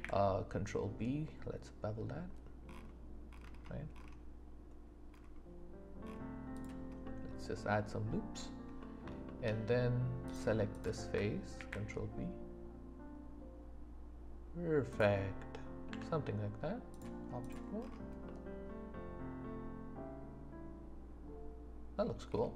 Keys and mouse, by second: 6.5 click, 7.0-8.1 middle drag, 8.8 middle click, 9.2 shift+middle click, 10.2 click, 10.7 click, 11.5 ctrl+b, 14.9 click, 15.9 Tab, 18.2 middle click, 19.1-20.6 middle drag, 21.1 middle click.